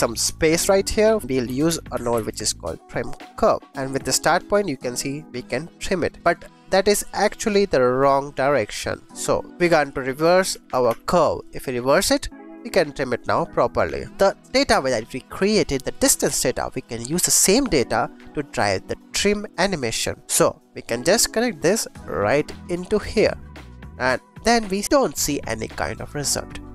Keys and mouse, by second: 0.4 click, 1.1 click, 1.2 shift+a, 3.6 click, 3.9-6.1 drag, 6.2 click, 7.3 click, 9.6 shift+a, 11.9 click, 12.5-14.4 drag, 14.7 click, 15.2 click, 16.7 click, 17.0 click, 17.7 click, 18.6-19.9 drag, 20.6 click, 21.6-23.2 drag, 23.7 click.